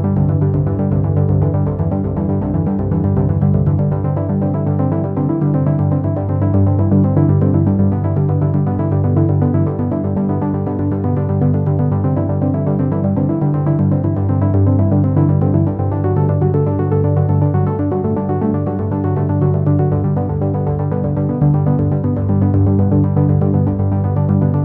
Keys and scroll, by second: 13.0 ctrl+z.